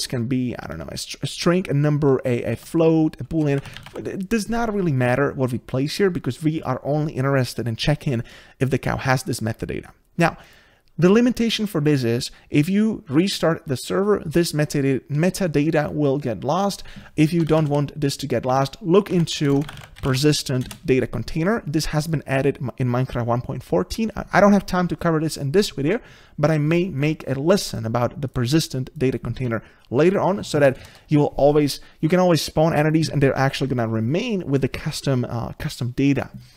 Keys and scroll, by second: 19.5 ctrl+BackSpace, 20.6 Return.